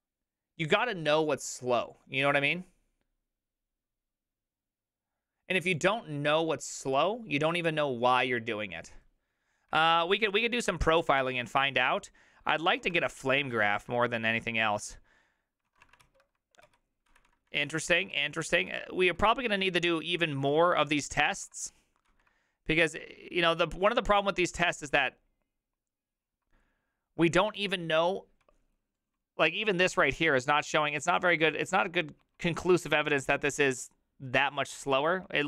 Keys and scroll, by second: 13.0 ctrl+a, 13.0 2, 13.4 ctrl+a, 13.8 3, 15.7 ctrl+a, 15.8 [, 16.0 ctrl+u, 16.7 ctrl+u, 17.5 ctrl+d, 17.9 ctrl+u, 18.1 ctrl+u, 18.5 ctrl+d, 19.0 ctrl+d, 20.5 ctrl+u, 21.4 ctrl+u, 22.1 ctrl+d, 27.2-27.9 typing, 29.1 typing.